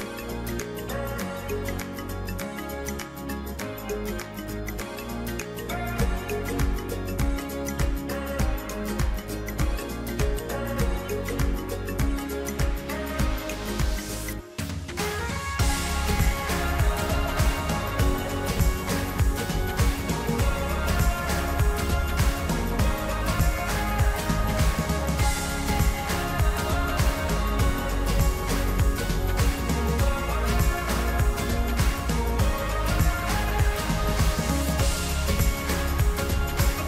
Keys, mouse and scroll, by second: 4.8 click, 8.5 3, 9.1 click, 9.8-22.4 middle drag, 25.2-27.4 middle drag, 29.0 e, 34.9-36.8 middle drag.